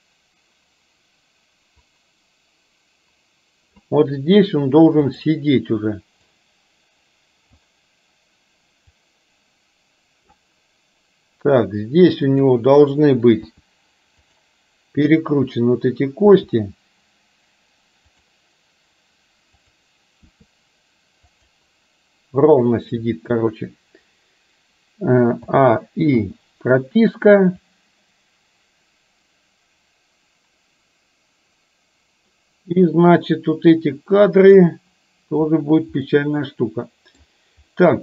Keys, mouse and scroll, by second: 6.4-7.7 drag, 9.1-10.4 drag, 12.3 click, 13.6 r, 16.3 r, 19.7 click, 20.3 r, 25.4 a, 26.3 i, 27.8-34.7 drag, 36.2-37.3 middle drag, 37.8-38.0 middle drag.